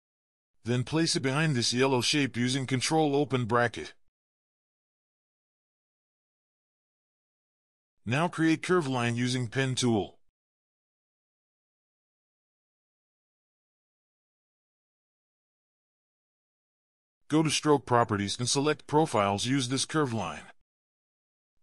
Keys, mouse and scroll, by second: 2.0 ctrl+shift+[, 5.0 ctrl+shift+[, 5.9 ctrl+scroll up 1, 6.1 ctrl+scroll down 1, 6.2 ctrl+scroll up 1, 6.3-6.7 scroll down 1, 6.7 p, 7.3-7.9 alt+scroll down 1, 10.6 ctrl+scroll down 1, 11.3 v, 21.3 alt+scroll up 1, 21.5 ctrl+scroll down 2.